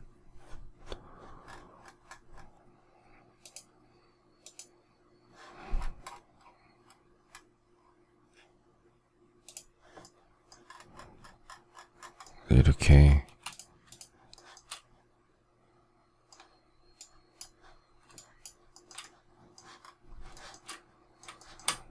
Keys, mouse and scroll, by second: 13.8 shift+click, 14.3 shift+middle click, 18.1 shift+click, 18.7 shift+middle click, 20.3 shift+middle click.